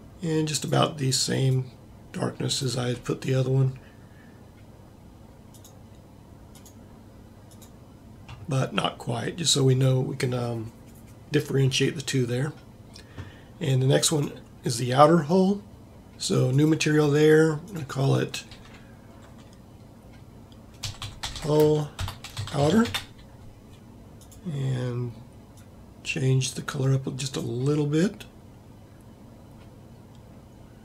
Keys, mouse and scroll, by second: 7.2-8.3 middle drag, 14.3 right click, 16.0 middle click, 21.3 l.